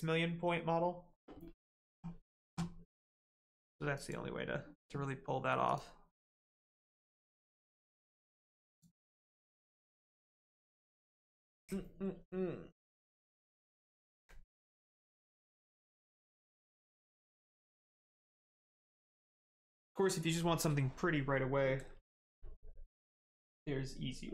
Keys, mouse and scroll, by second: 3.9 click, 6.7 scroll down 1, 8.6 click, 23.0 right click.